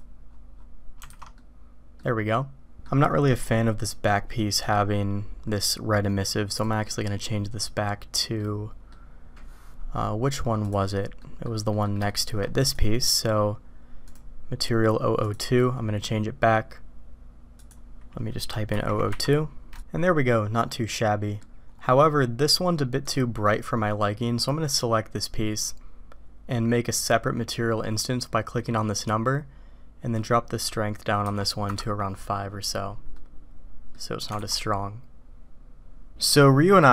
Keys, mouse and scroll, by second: 1.2 alt+a, 1.4 click, 2.8 click, 6.5 click, 8.5 middle click, 11.2 middle click, 11.7 middle click, 12.1 shift+click, 12.6 click, 14.0 click, 15.2 click, 17.5 click, 18.8 0, 20.6-21.2 drag, 21.2 middle click, 21.2 click, 23.0 click, 24.7 click, 28.9 click, 30.2-32.2 drag, 33.2 middle click, 33.9 click, 34.4 alt+a.